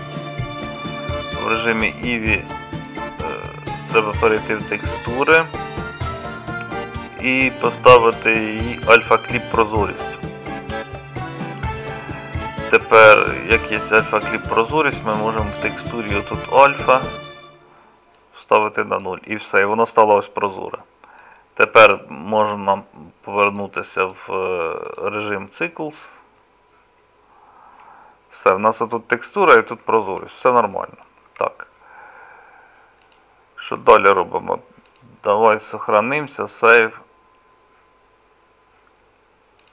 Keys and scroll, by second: 31.3 Tab.